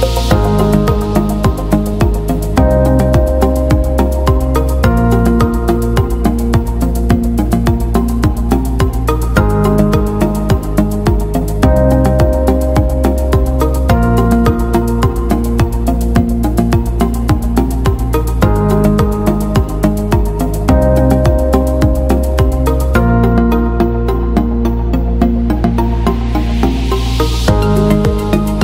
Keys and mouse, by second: 1.0 middle click, 1.6 KP_3, 2.3 KP_1, 3.3 alt+z, 4.9 middle click, 6.1 middle click, 7.1 right click, 7.4 middle click, 12.3 middle click, 14.2 KP_1, 14.9 g, 16.5 right click, 16.8 g, 18.0 right click, 19.1 right click, 19.3 g, 20.0 KP_3, 20.8 middle click, 21.5 middle click, 22.5 right click, 23.3 shift+right click, 23.7 middle click, 24.2 KP_1, 24.7 g, 26.3 g.